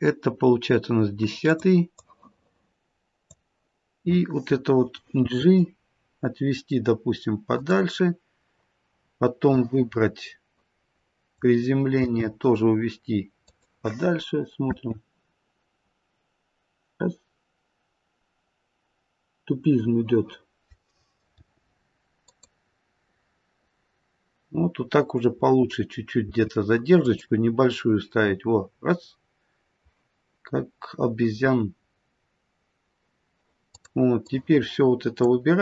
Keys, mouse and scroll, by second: 1.4 click, 1.4-1.9 scroll up 1, 1.9 click, 9.5 click, 11.9 g, 14.7 space, 21.4 g, 26.3 g, 33.7 click, 34.2 click.